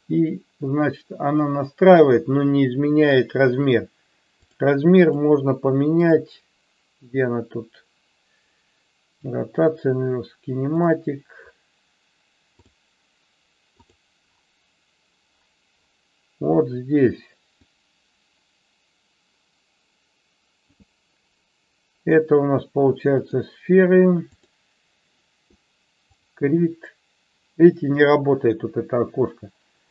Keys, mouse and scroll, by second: 4.5 click, 4.9 click, 13.7 click, 17.7-20.7 drag, 23.3-24.4 drag, 26.1 click.